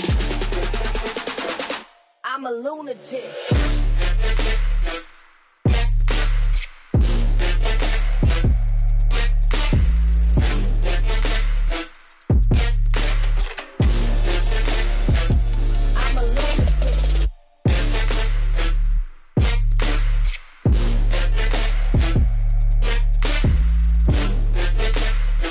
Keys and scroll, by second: 5.9 Delete.